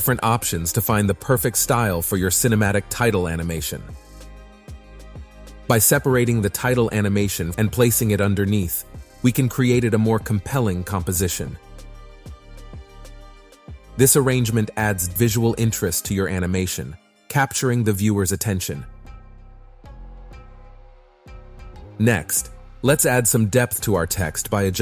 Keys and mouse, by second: 1.0-2.2 typing, 2.7 Tab, 3.8 KP_1, 4.9 click, 6.1 shift+d, 6.9 click, 7.8 Tab, 8.2 ctrl+a, 8.6-11.7 typing, 12.1 ctrl+a, 12.8 Tab, 13.7 s, 15.7 click, 17.2 click, 17.7 click, 18.1-19.3 middle drag, 19.6 middle click, 20.3 click, 24.6 click.